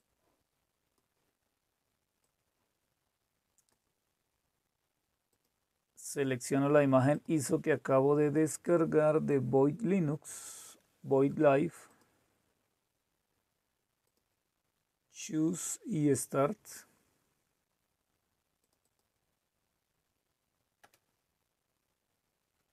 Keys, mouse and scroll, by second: 0.0 click, 2.1-5.2 drag, 5.4 click, 7.3 click, 10.6-13.5 drag, 14.1-17.1 drag, 18.6 click, 20.8 Return.